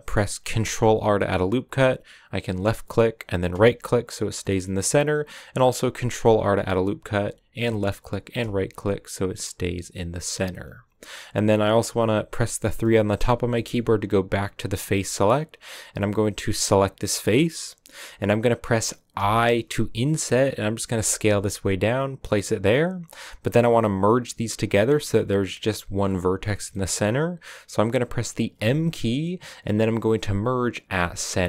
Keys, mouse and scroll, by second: 0.5 ctrl+r, 4.3-5.9 middle drag, 5.9 ctrl+r, 8.7 scroll down 2, 9.0-13.1 middle drag, 13.1 3, 13.4 middle click, 13.7-14.5 scroll up 1, 14.5-14.8 scroll up 1, 16.9-19.3 right drag, 19.3 i, 23.3 scroll up 2, 26.6-28.4 middle drag, 28.4 m.